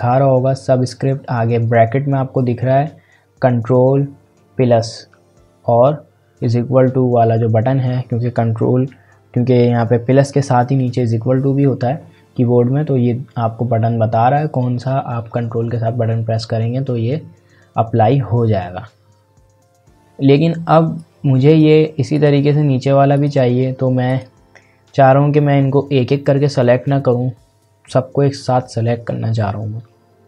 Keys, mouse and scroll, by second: 21.0 click.